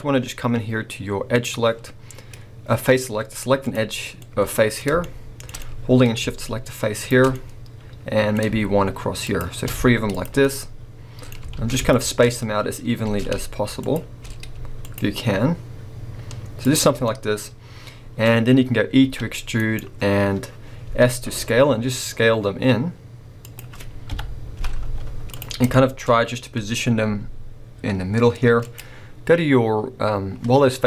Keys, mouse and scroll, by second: 1.4-3.4 drag, 3.6 click, 3.9 scroll down 2, 3.9-6.9 middle drag, 6.9 shift+click, 7.3-9.2 middle drag, 9.2 shift+click, 9.7 z, 10.4 middle click, 11.6 ctrl+z, 11.9 shift+click, 13.1 ctrl+z, 13.8 shift+click, 14.8 shift+click, 16.6 shift+click, 17.2-18.3 middle drag, 18.3-19.1 scroll up 2, 19.1 e, 19.6-20.9 right drag, 20.9 s, 23.6 click, 24.7 KP_7, 24.8 z, 26.1 scroll, 27.0 g, 28.8 click.